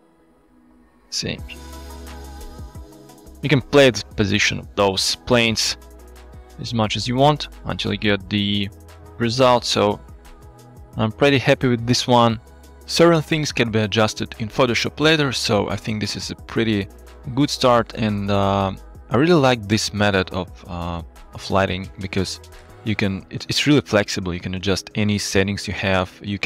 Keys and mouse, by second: 0.6 g, 0.7 z, 4.6 drag, 5.6 middle drag, 5.7 drag, 5.7 middle click, 5.9 click, 5.9-6.6 middle drag, 8.8-9.2 shift+middle drag, 10.5 alt+shift+z, 18.2 shift+middle click, 20.8 middle drag, 22.7 shift+middle click, 23.4 shift+middle click, 24.6 shift+middle click, 25.4 middle drag.